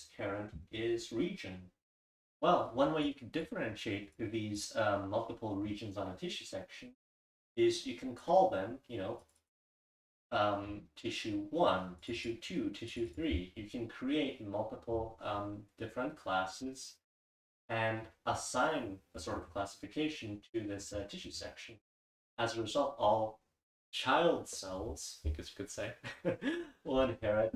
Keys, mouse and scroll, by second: 0.1-0.8 scroll up 1, 0.8-2.1 scroll up 1, 2.1-2.8 scroll up 1, 2.8-3.4 scroll up 1, 3.0 click, 4.1-4.6 drag, 7.4-8.2 drag, 7.4-8.1 scroll up 1, 8.1-8.8 scroll up 1, 8.8-10.8 scroll up 1, 9.2 click, 9.7-10.8 drag, 10.8-12.0 scroll up 1, 12.0 click, 12.0 scroll up 1, 12.8-14.1 drag, 15.4 click, 17.5-18.1 scroll up 2, 18.1-19.4 scroll up 1, 19.4-20.1 scroll up 1, 20.1-20.8 scroll up 1, 20.8 scroll up 1, 20.9-21.4 scroll down 2, 21.4-22.8 scroll down 1, 22.8-24.8 scroll down 1, 24.8-25.4 scroll down 1, 25.4-26.5 scroll down 1, 26.5-27.4 scroll down 1, 27.4-27.5 scroll down 1.